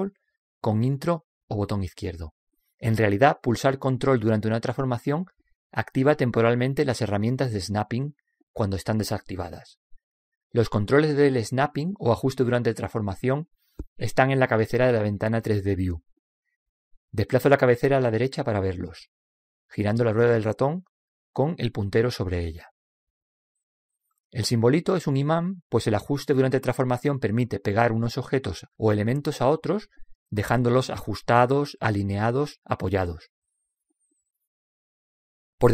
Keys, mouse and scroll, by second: 17.9-22.1 middle drag.